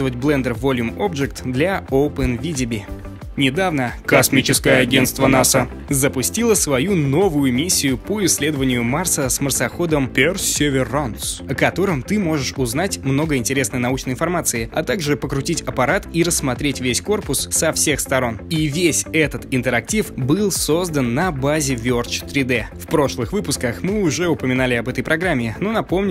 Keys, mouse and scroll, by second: 24.7 middle click.